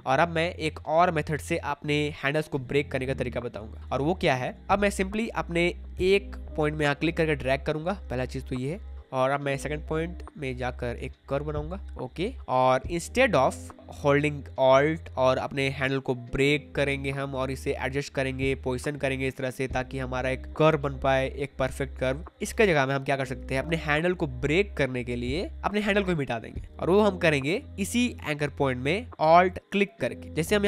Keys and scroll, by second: 3.9 space, 22.5 ctrl+z.